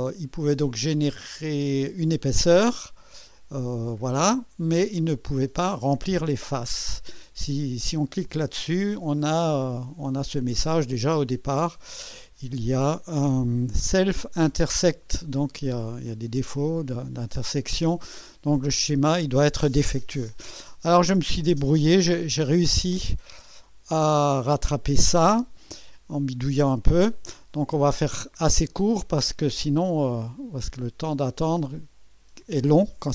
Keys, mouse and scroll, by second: 15.7-18.0 drag, 24.6 Delete, 27.7 scroll down 1, 28.3 click, 30.5 click.